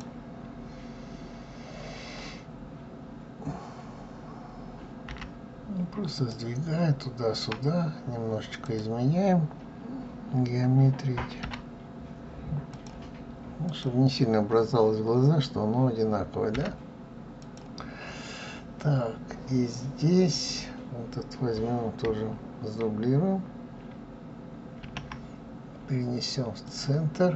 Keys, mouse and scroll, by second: 8.3 click, 11.1 g, 13.4 click, 16.2 g, 20.0 click, 27.1 click.